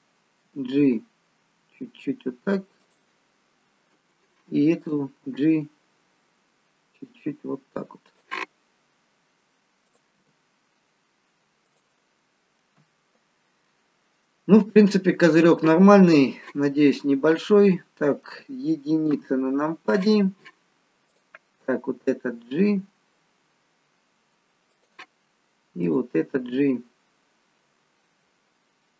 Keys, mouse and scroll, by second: 0.4 g, 4.8 click, 5.2 g, 9.8 click, 10.0 g, 12.2-14.2 scroll down 2, 12.5 middle click, 14.2 middle click, 19.0 KP_1, 20.1-20.7 scroll up 1, 20.7-21.1 scroll up 1, 21.1 click, 22.7 g, 25.8 click, 26.4 g.